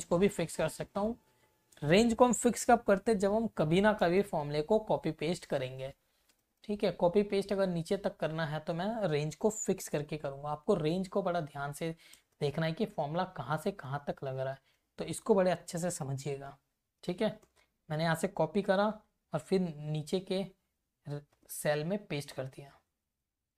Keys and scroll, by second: 0.3 shift+Left, 3.0 F4, 3.7 Left, 6.4 shift+Left, 8.0 Right, 10.7 Left, 13.6 shift+Left, 16.2 F4, 17.2 Return, 17.6 Up, 18.7 ctrl+c, 19.0 Down, 20.0 Up, 21.3 ctrl+shift+v, 22.3 Up, 22.7 Down.